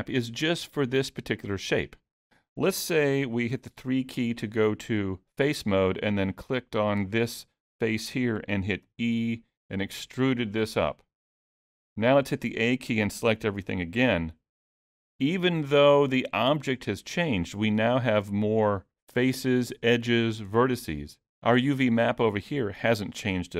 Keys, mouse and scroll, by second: 3.5 3, 6.2 click, 6.9-8.7 scroll down 3, 8.8 e, 13.6 a, 15.3 middle click.